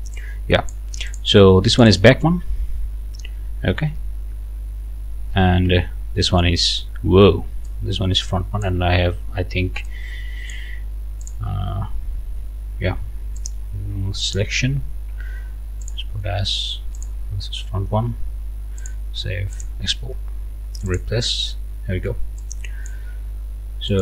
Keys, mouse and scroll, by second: 0.2 click, 1.1 click, 1.7 click, 4.4-5.0 scroll down 4, 5.6 Right, 7.7-8.8 drag, 9.9 click, 11.3 click, 13.4 click, 14.2 click, 15.8 click, 16.9 click, 18.8 click, 19.5 click, 20.9 click, 22.4 click, 23.9 click.